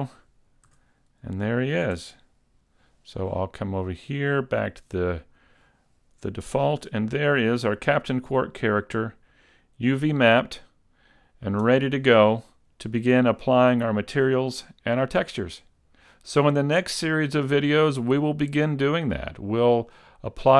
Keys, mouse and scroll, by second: 0.7 a, 2.0 Tab, 4.0 click, 6.1-6.5 scroll down 1, 6.8 a, 7.4 middle click.